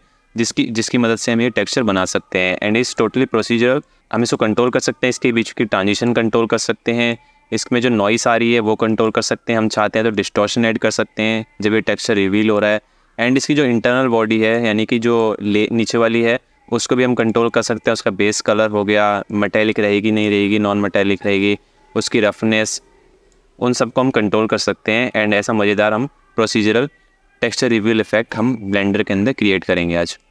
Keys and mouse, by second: 1.6-2.6 alt+shift+middle drag, 3.6 click, 4.4 click, 6.8 click, 9.8 click, 14.2-14.8 alt+shift+middle drag, 16.8 click, 18.9-20.0 drag, 20.9-22.0 drag, 22.3 click, 24.6 space, 28.4-29.5 drag, 29.9 ctrl+click.